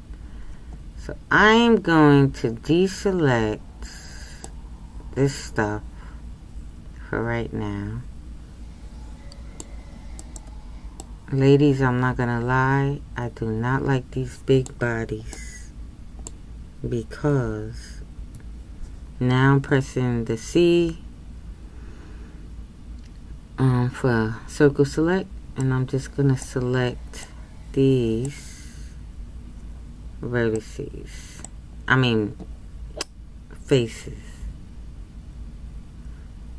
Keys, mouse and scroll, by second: 11.0-14.6 middle drag, 15.5-25.6 middle drag.